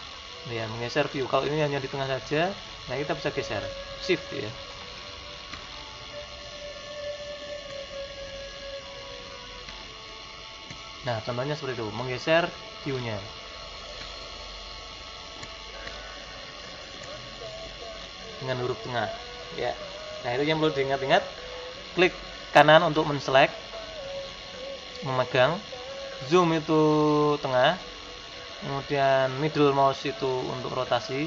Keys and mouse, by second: 2.1-22.6 middle drag, 22.6-26.6 right drag, 27.1-31.2 middle drag.